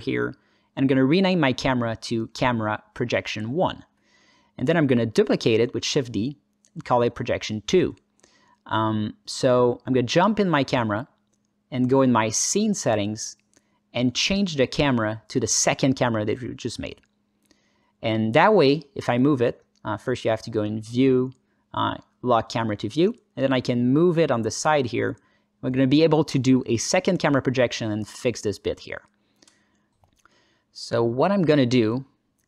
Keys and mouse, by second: 0.0 g, 1.1 click, 1.4-3.5 drag, 5.3 shift+d, 5.7 Escape, 6.3 click, 6.6-8.0 drag, 9.5 KP_0, 16.1-17.6 drag, 20.3 click, 20.3 n, 23.7-24.7 alt+middle drag, 25.0 alt+shift+middle click, 25.4 ctrl+alt+middle click, 25.6-26.3 alt+middle drag, 26.4 alt+shift+middle click, 26.9 alt+middle click, 27.4 alt+shift+middle click, 29.4 click, 29.8 click, 30.7 click, 32.3 alt+shift+z.